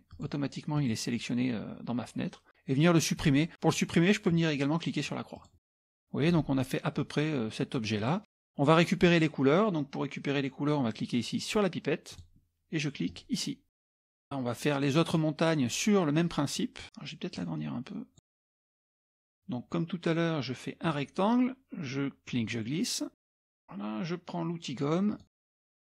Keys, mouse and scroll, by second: 0.1 click, 0.8 click, 5.4 click, 5.7 middle click, 5.7 scroll down 1, 6.2 click, 8.1 middle click, 8.1-8.6 scroll up 1, 12.1 click, 13.1 click, 14.2 click, 14.8-15.5 scroll up 1, 16.6 scroll up 1, 17.4-19.1 drag, 20.8 click, 22.3-23.5 drag, 25.1 click.